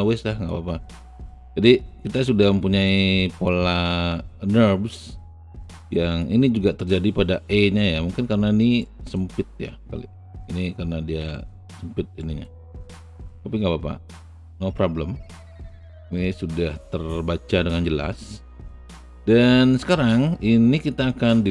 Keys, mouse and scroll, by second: 0.4 alt+right click, 1.0-3.5 alt+drag, 5.6-7.9 alt+drag, 8.8 alt+middle click, 8.8 alt+right click, 9.0-11.9 alt+middle drag, 12.2 alt+right click, 12.7-13.0 alt+scroll down 2, 13.3-17.7 alt+drag.